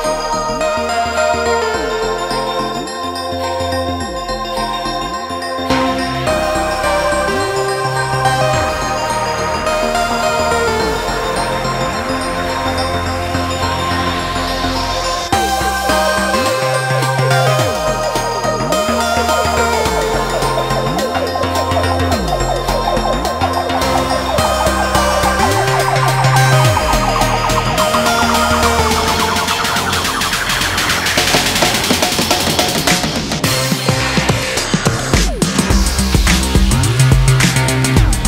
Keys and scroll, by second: 3.3-4.1 typing, 7.6 typing.